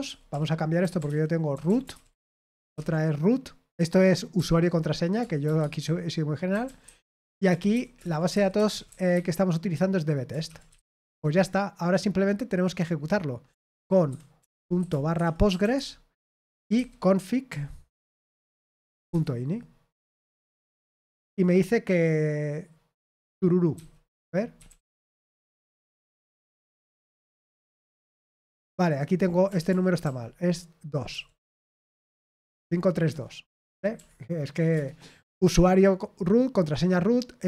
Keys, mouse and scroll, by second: 0.0-3.2 typing, 4.3 typing, 5.4-11.4 typing, 13.7-19.0 typing, 19.1 Return, 23.7 ctrl+c, 24.3-25.4 typing, 25.6 Right, 25.9 Return, 26.9-33.0 typing, 31.6 Escape, 33.0 Return, 33.9 ctrl+p, 34.7 Return.